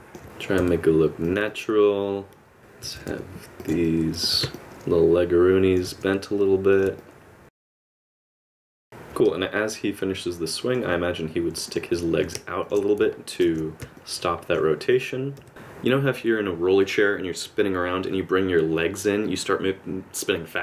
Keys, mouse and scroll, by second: 0.2 click, 0.2 r, 0.2 i, 0.6 r, 1.5 middle click, 2.6 click, 2.6 i, 2.8 r, 3.8 alt+right click, 4.5 middle click, 5.9 r, 7.0 middle click, 7.8 r, 8.0 i, 8.2 click, 8.3 r, 8.5 middle click, 8.8 i, 11.7 click, 12.6 shift+click, 13.4 alt+r, 14.0 middle click, 14.9 click, 15.4 r.